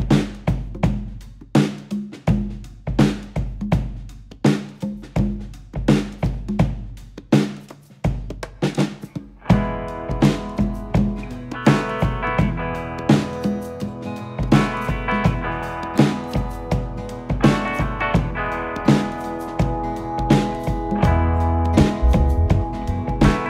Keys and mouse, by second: 1.3 click, 2.7 g, 4.9 click, 7.4 e, 12.3 click, 13.7 s, 16.8 click, 20.0 shift+middle click.